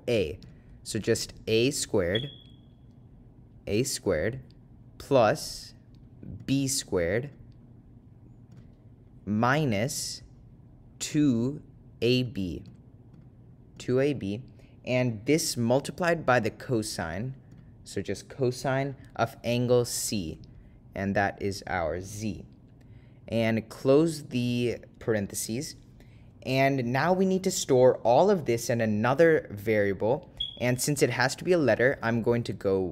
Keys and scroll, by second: 10.0 -, 11.2 2, 22.1 2, 23.9 ), 24.5 ).